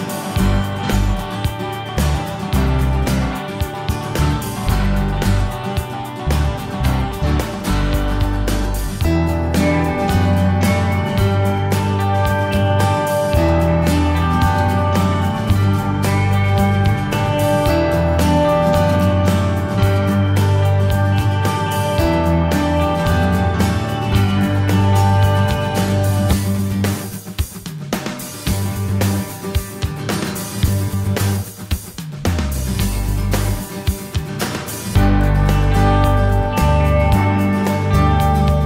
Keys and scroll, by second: 24.3 ctrl+d, 33.4 F12.